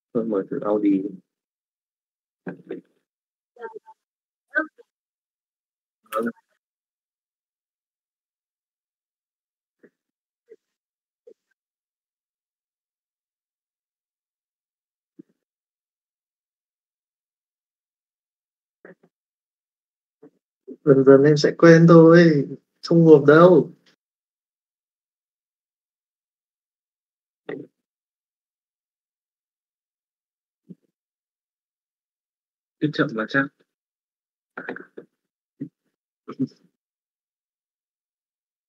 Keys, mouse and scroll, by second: 7.7 middle click, 8.5 middle click, 8.9 shift+middle click.